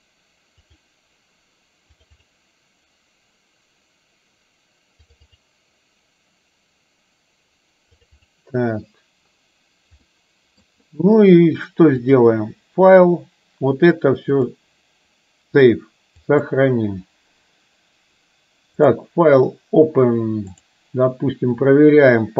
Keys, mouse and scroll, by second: 14.5-16.6 drag, 18.9-20.9 drag.